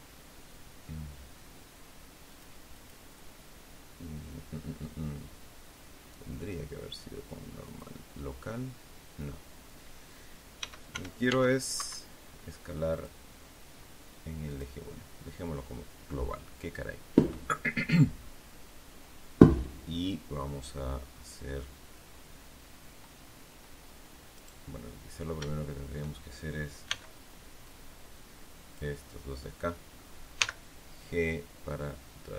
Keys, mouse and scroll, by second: 2.2 click, 2.6 click, 7.6 click, 10.5 s, 10.8 y, 11.7 Escape, 12.8 click, 14.4 click, 24.3 right click, 26.8 b, 27.5-28.9 drag, 30.3 g.